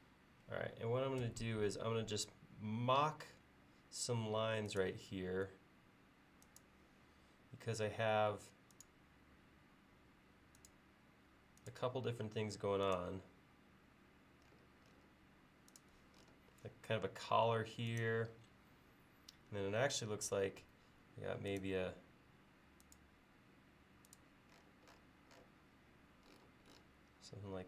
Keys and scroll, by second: 1.3 l, 20.7 a.